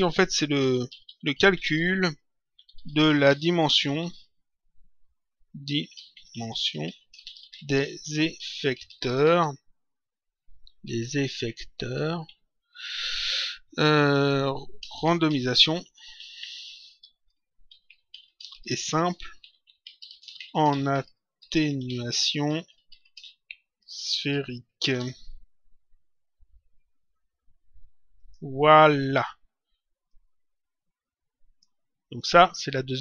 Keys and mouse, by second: 0.5-3.7 typing, 5.7-9.4 typing, 10.8 Left, 11.9 Delete, 12.2 End, 12.8 s, 14.8-24.9 typing, 28.1 click, 30.1 click, 32.1 click.